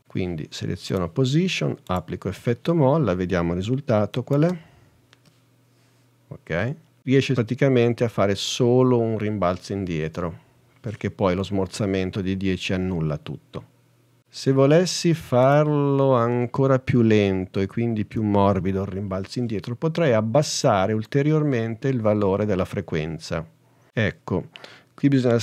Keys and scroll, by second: 4.5 h.